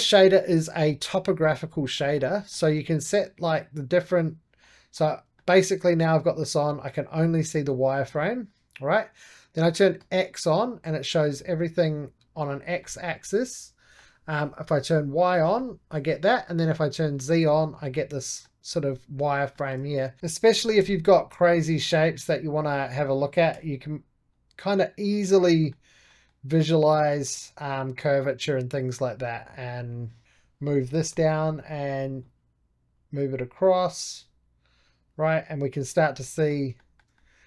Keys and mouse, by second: 0.0 click, 0.8 middle click, 1.2 click, 1.9-3.3 middle drag, 3.3-4.5 drag, 4.5-9.1 middle drag, 9.9-12.4 drag, 12.7-14.8 middle drag, 14.8 click, 15.5-16.8 middle drag, 16.8 click, 17.4-20.4 middle drag, 20.4 shift+s, 21.4 middle click, 22.1-23.4 drag, 23.4 g, 24.2-25.4 drag, 25.4-26.5 middle drag, 26.5 right click, 27.1 click, 27.4-29.0 right drag, 29.0-31.0 drag, 31.0 g, 32.1-35.7 drag, 36.1 middle click, 37.1-37.4 middle drag.